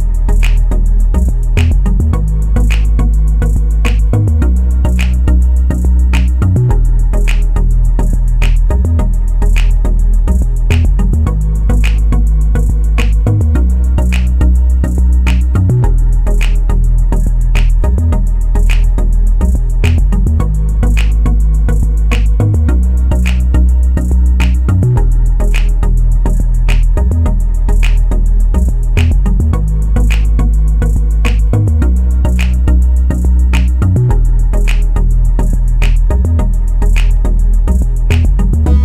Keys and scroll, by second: 11.9-12.8 typing, 19.8-21.0 typing, 22.7-24.0 typing.